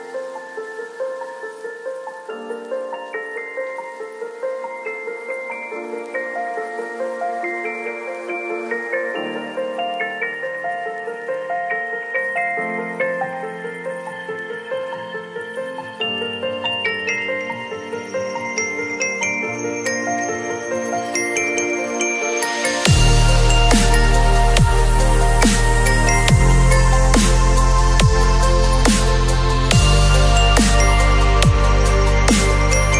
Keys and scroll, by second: 0.4 ctrl+shift+n, 0.7 Return, 1.2 b, 2.2 [, 4.6 ctrl+z, 5.4 x, 7.2 ctrl+], 18.0 v, 25.9 space, 26.4 ctrl+c, 26.7 ctrl+w, 29.3 ctrl+v, 29.5 ctrl+t.